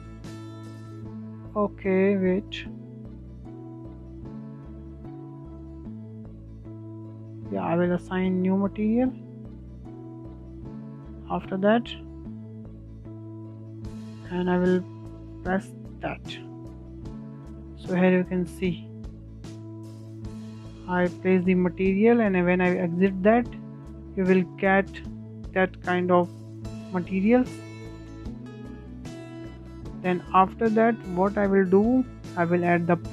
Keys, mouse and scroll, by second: 1.1-4.1 drag, 6.6-13.1 drag, 13.3-15.8 drag, 15.8 scroll down 1, 16.1-17.7 shift+middle drag, 17.7 click, 19.4 Tab, 19.5-20.0 scroll up 4, 20.0-20.5 scroll down 6, 20.5-22.3 middle drag, 22.3-22.6 scroll up 2, 22.6-25.5 shift+middle drag, 25.5 scroll up 1, 25.6-27.1 middle drag, 27.1 scroll down 2, 27.3-28.1 shift+middle drag, 28.1-28.6 scroll up 2, 28.6-28.9 shift+middle drag, 28.9-29.2 scroll down 2, 29.2-29.6 shift+middle drag, 29.6-29.9 scroll down 2, 29.9-31.7 shift+middle drag, 31.7 shift+a.